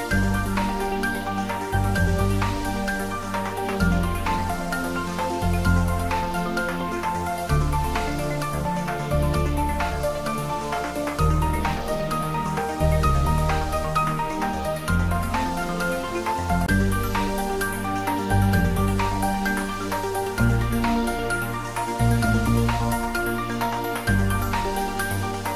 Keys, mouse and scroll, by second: 0.0-0.7 typing, 3.0 click, 3.5 scroll down 1, 6.3 g, 6.8 x, 7.3 Left, 9.3 space, 11.0 scroll down 1, 12.7-15.4 typing, 17.2 click, 18.9 g, 21.3 y, 21.6 Up, 23.9 Up.